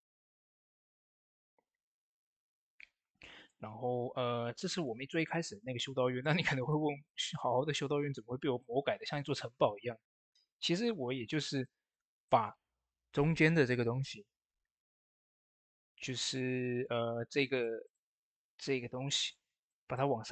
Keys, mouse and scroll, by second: 0.3 Tab, 1.0 click, 5.2 shift+middle click, 5.6 shift+scroll up 2, 5.9 middle click, 6.6 scroll up 1, 6.9 middle click, 10.1 shift+middle click, 11.4 click, 12.1 shift+middle click, 15.0 typing, 15.0 click, 19.8 shift+middle click.